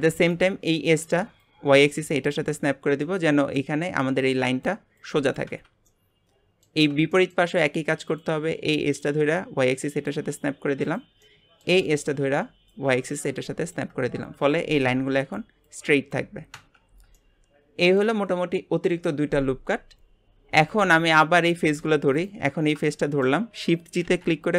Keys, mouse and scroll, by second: 0.3 click, 1.4 click, 2.7 scroll down 1, 3.0-6.9 middle drag, 6.9 scroll down 1, 7.1 shift+middle click, 7.6-8.1 scroll up 1, 8.1 click, 9.1 click, 10.9 click, 11.2-12.7 middle drag, 12.7 click, 16.9 scroll down 3, 17.2-20.2 middle drag, 20.7 click, 21.2-22.2 middle drag, 22.2 click, 22.5 scroll up 1, 23.0-24.1 shift+middle drag, 24.1 shift+g.